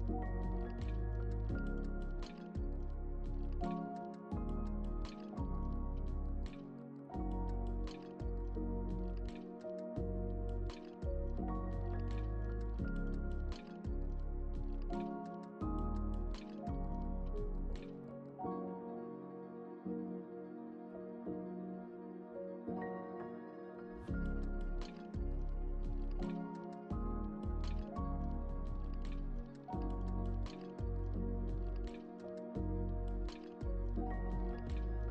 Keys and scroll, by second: 2.8 Return, 10.6 ctrl+alt+shift+e.